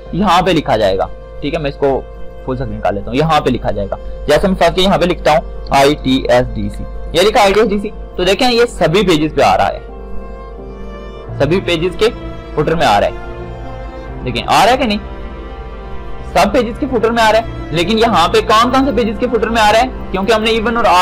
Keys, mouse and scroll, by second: 2.4 click, 5.0 BackSpace, 6.0 shift+i, 6.3 shift+t, 8.4-19.0 drag.